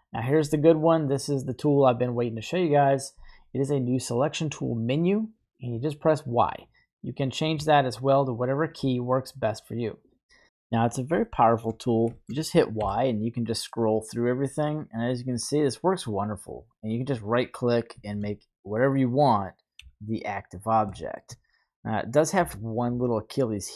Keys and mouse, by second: 11.2-11.6 shift+middle drag, 12.1 shift+middle click, 12.8 y, 17.9 shift+middle click, 19.7 KP_3, 20.9 shift+middle click, 22.3 y.